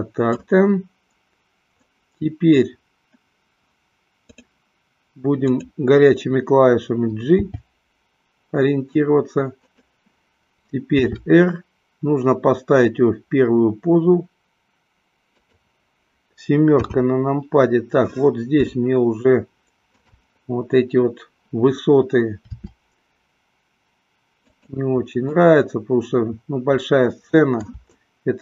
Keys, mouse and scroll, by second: 4.5 click, 7.7 g, 11.3 r, 16.0 click, 17.0 KP_7, 18.8-20.7 shift+middle drag, 22.6 r, 24.8 click, 25.7-28.4 middle drag.